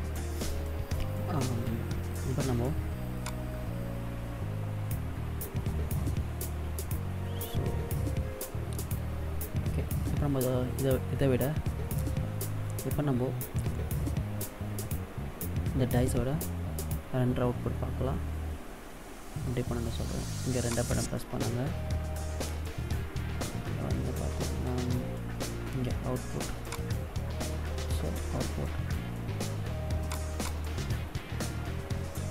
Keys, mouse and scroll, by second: 2.9 click, 20.3 click, 22.9-24.0 scroll down 4, 24.5-25.6 scroll down 3, 26.4 click.